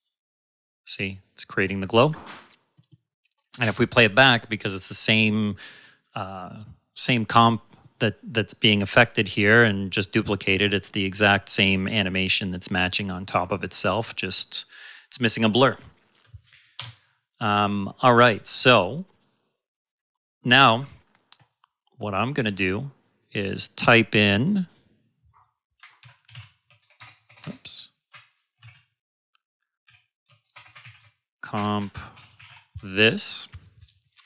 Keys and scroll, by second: 3.6 space, 16.7 space, 25.7-26.8 typing, 28.3-30.8 typing, 31.5 Return, 31.9-32.9 typing.